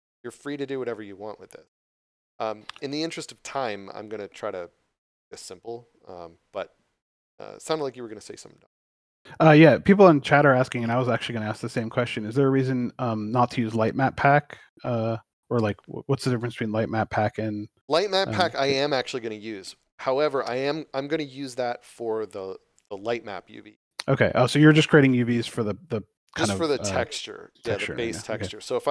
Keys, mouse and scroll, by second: 9.5 middle click, 10.6 scroll up 1, 11.1 middle click, 11.5 shift+middle click, 12.3 middle click.